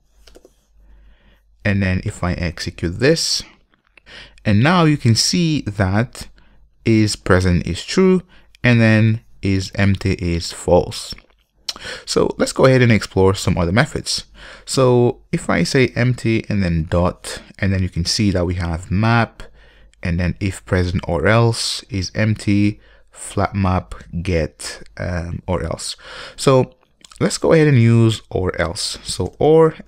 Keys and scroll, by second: 2.8 ctrl+F5, 16.4 Return.